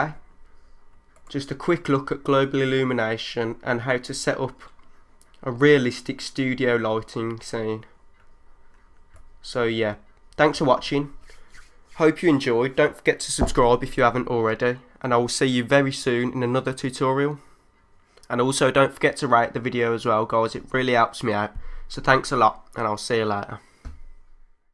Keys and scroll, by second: 9.1 3.